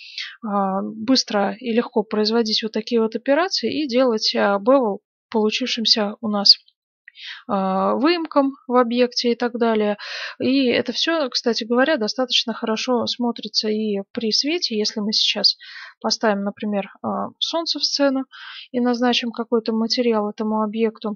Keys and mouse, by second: 13.3-16.1 drag, 13.3-15.7 right drag, 13.5 x, 14.5 shift+a, 16.1 r, 16.8-18.2 drag, 18.2 right click, 19.2-21.1 drag.